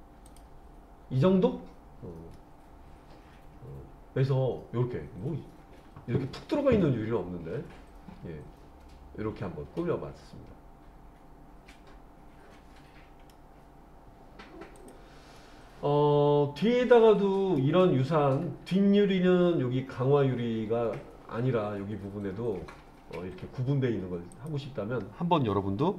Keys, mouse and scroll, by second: 0.3 click, 1.6-2.4 scroll up 1, 2.4-13.3 middle drag, 14.8 click, 15.4-17.6 middle drag, 24.4 click.